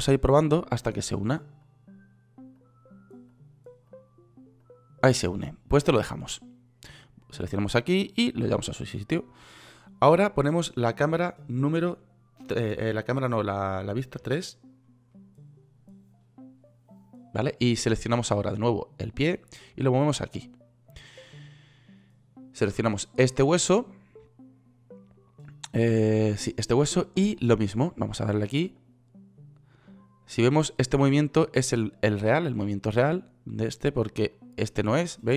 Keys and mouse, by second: 14.6 KP_3.